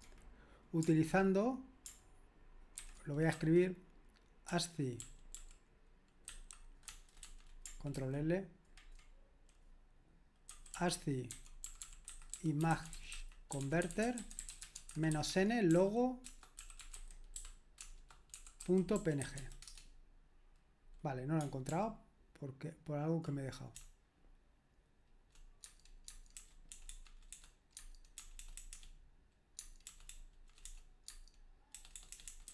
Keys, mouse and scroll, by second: 2.8 ctrl+c, 3.4-7.3 typing, 7.9 ctrl+l, 10.5-19.9 typing, 21.7 ctrl+p, 23.8-25.3 BackSpace, 25.6 Tab, 26.1 Tab, 26.4-28.7 typing, 27.8 Tab, 29.6 Tab, 29.9-30.7 typing, 32.3-32.5 typing.